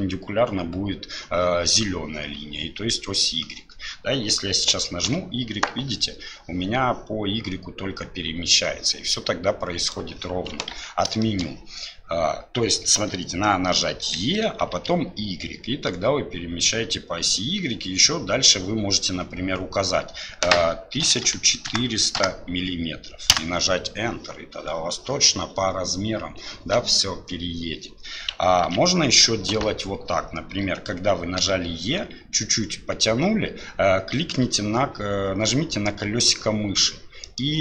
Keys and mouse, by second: 10.7 ctrl+z, 11.2 shift+click, 28.7 ctrl+z, 31.4 e.